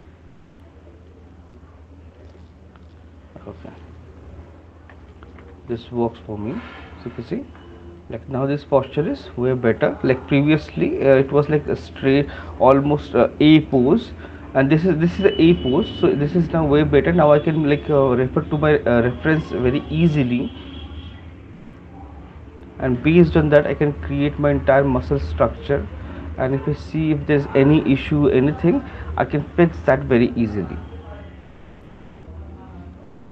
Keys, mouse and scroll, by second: 0.7 click, 2.3 shift+click, 3.9 ctrl+click, 5.6 q, 6.9 click, 7.4 alt+click, 10.2 alt+click, 11.5 alt+click, 22.1 alt+click, 22.2 shift+click, 23.3 alt+click, 26.1 click, 27.4 right click, 28.6 alt+click, 30.8-32.4 typing.